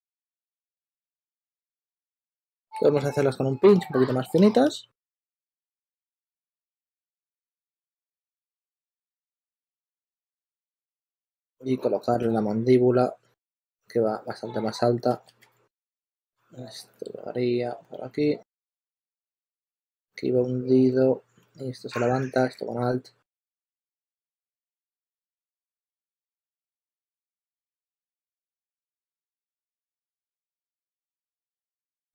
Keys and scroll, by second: 0.0-0.5 typing, 2.0 s, 2.6 shift+1, 4.9-7.1 typing, 5.9 super+a, 9.7-10.8 typing, 12.2 s, 13.5 super+z, 15.1 super+z, 15.4 2, 18.2 s, 20.8 s, 22.2 s, 23.7 s, 24.9 s, 26.9-30.0 typing, 31.3 super+z, 31.5-32.1 typing.